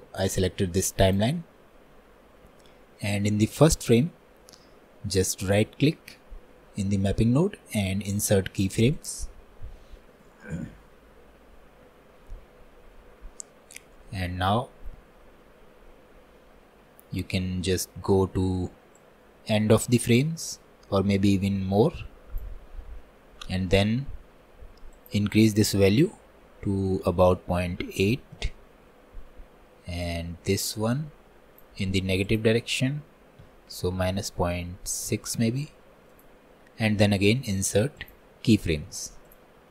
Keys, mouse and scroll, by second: 19.1-22.4 drag, 33.6-38.1 drag, 38.1-39.7 right drag.